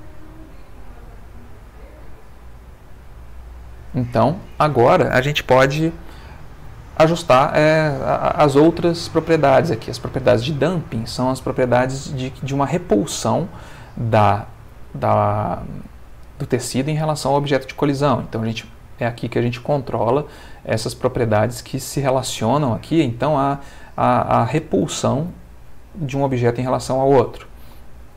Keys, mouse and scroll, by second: 3.3 Escape, 5.4 middle click, 9.7 middle click, 27.4-28.1 middle drag.